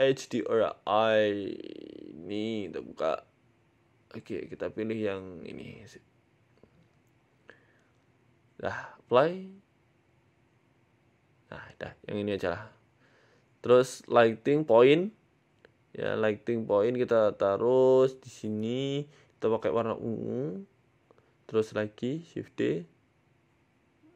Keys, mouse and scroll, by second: 0.6 n, 1.5 click, 2.9 click, 6.3 click, 6.7 click, 7.2 click, 8.1 click, 8.5 click, 10.7 click, 12.6 shift+a, 15.7 scroll up 2, 15.7 z, 16.4-17.0 scroll up 5, 16.4 g, 18.2 g, 19.5 click, 22.6 shift+d.